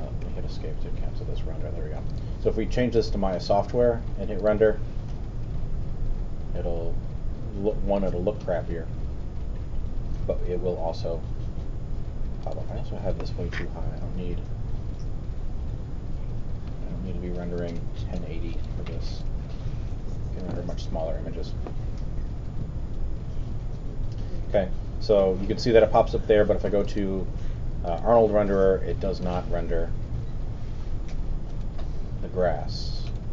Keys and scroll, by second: 0.2 super+z, 14.0 super+z.